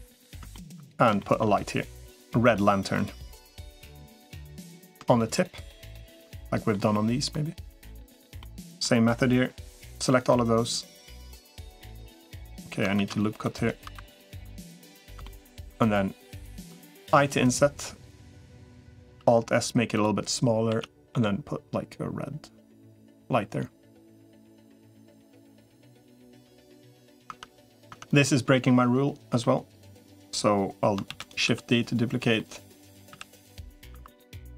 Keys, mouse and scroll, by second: 0.3 shift+middle click, 1.0 shift+middle click, 2.1 middle click, 3.2-4.3 middle drag, 4.7 click, 6.2 middle click, 8.2 middle click, 9.9 i, 12.9 ctrl+r, 14.1 3, 15.1 middle click, 16.1 click, 17.1 |, 18.1 middle click, 18.9 i, 19.1 alt+s, 20.5 a, 20.9 g, 25.4 middle click, 26.0 shift+middle click, 26.8 middle click, 27.1 Tab, 27.7 Tab, 27.9 click, 29.2 middle click, 30.9 shift+d, 31.3 s, 32.2 middle click, 32.9 s, 34.1 2.